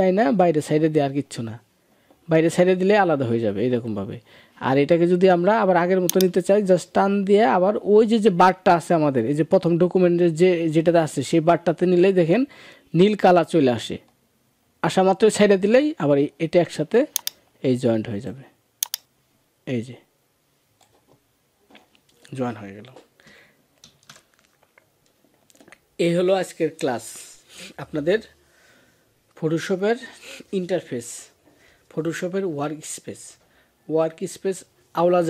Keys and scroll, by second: 23.6 ctrl+s.